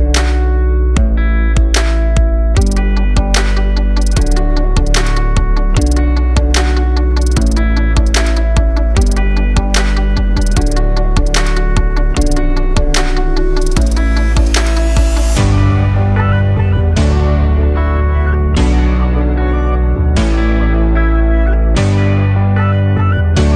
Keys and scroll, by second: 5.9 ctrl+0.